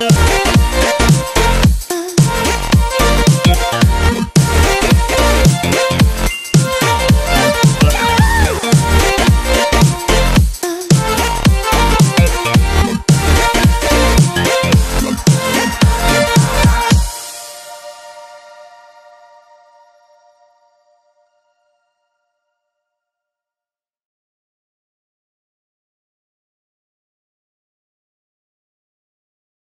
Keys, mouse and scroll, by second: 0.4 click, 5.2 right click, 6.1 click, 9.9 click, 16.3 ctrl+a, 17.6 click, 21.9 right click, 22.7 click, 28.5 ctrl+a, 28.8 ctrl+v.